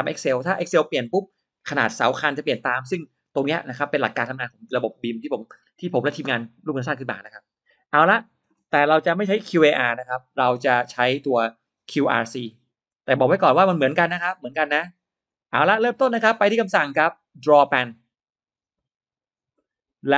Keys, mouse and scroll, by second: 11.4-13.0 drag, 18.6 click, 20.0-20.1 drag.